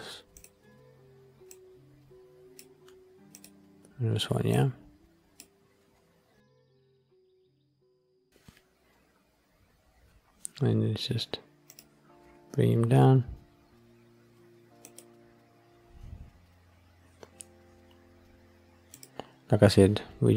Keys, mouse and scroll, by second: 0.3 click, 3.3 drag, 8.9 scroll up 2, 10.9-11.3 scroll down 2, 11.6 click, 12.6 g, 14.8 click, 19.0 click, 19.4-20.3 scroll down 3.